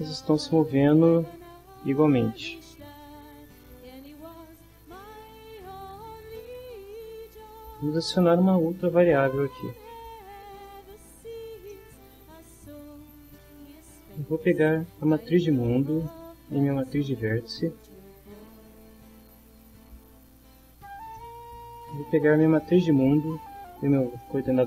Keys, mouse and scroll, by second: 4.2-7.5 drag, 11.7 middle click, 16.1 middle click, 17.9 middle click, 18.4 middle click, 21.1-22.3 middle drag, 24.2 middle click.